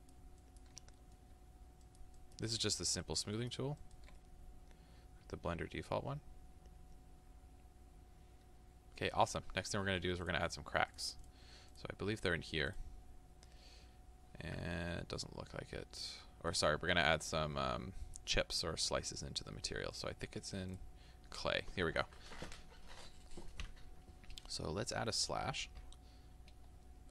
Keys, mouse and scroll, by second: 0.9 middle click, 1.9-4.2 ctrl+drag, 4.2-21.0 middle drag, 21.0-27.1 drag.